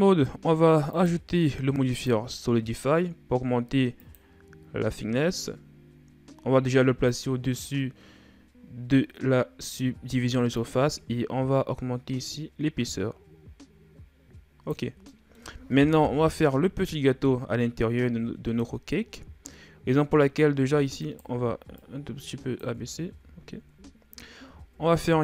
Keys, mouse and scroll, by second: 0.7 click, 1.7-4.8 drag, 6.9-7.5 drag, 10.4-13.4 drag, 14.9 middle click, 15.8 KP_1, 17.7-18.4 scroll up 3, 18.4-19.1 scroll down 3, 19.1-19.8 scroll up 2, 19.8 Tab, 20.8 alt+right click, 21.6 click, 22.6 Tab, 23.2-23.5 ctrl+scroll up 1, 23.5 a, 24.5 shift+a.